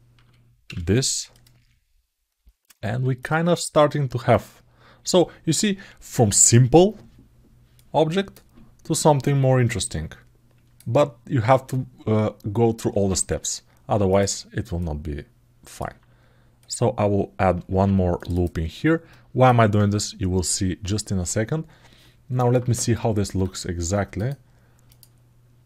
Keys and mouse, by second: 3.0 click, 4.1 click, 7.5 click, 9.0-10.5 drag, 14.5-15.5 alt+middle drag, 16.4 click, 17.5 ctrl+r, 18.9 middle click.